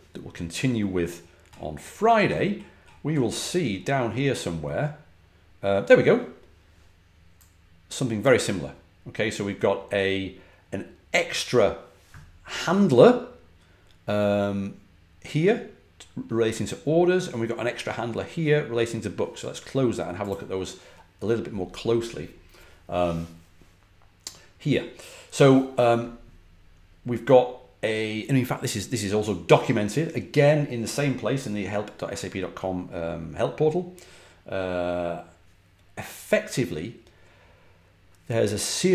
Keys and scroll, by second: 1.1-1.9 typing.